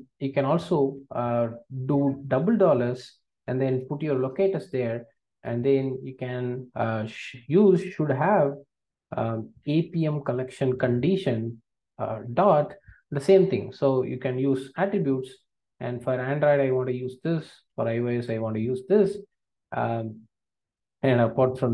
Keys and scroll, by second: 9.2 Return, 11.7 Return, 17.5 super+c, 18.7 super+v.